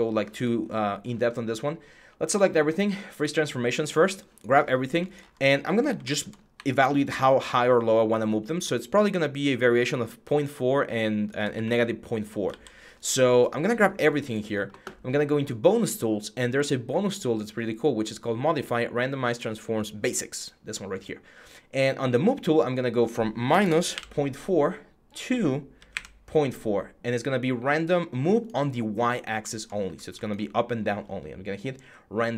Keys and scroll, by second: 6.3 w, 11.3 ctrl+z, 12.2 ctrl+z, 23.3 BackSpace, 25.3-26.2 typing, 29.6 w.